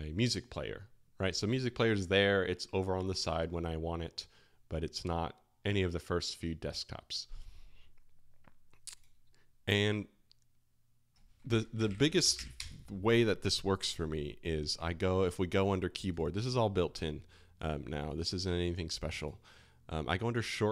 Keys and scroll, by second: 9.0 space, 11.5 super+space, 11.5-13.0 typing.